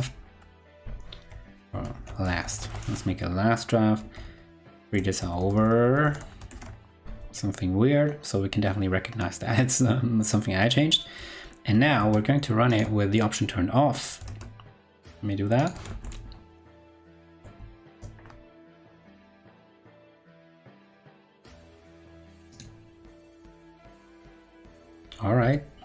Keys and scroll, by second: 4.0 super+Right, 6.4 super+Right, 11.7 super+s, 11.9 super+Tab, 14.2 super+Tab, 17.0 ctrl+Right, 17.8 super+r, 25.3 ctrl+Left.